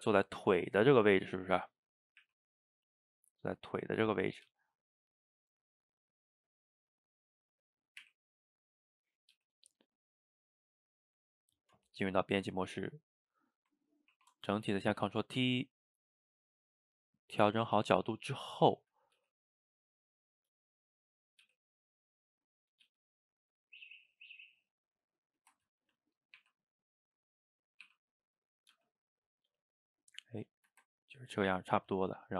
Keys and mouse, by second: 0.2-2.3 middle drag, 2.3 r, 3.2-4.5 middle drag, 4.5 g, 5.4-8.0 middle drag, 8.0 r, 9.4 g, 10.9 Tab, 12.3 shift+right click, 12.6-14.2 ctrl+middle drag, 14.2 ctrl+t, 17.2-18.2 middle drag, 18.2 click, 18.8 shift+click, 19.2 g, 21.2 click, 21.5 g, 22.5 shift+click, 22.9 g, 24.0-26.4 middle drag, 26.4 r, 27.9 r, 28.8 g, 30.6-32.2 ctrl+shift+middle drag, 32.2 click.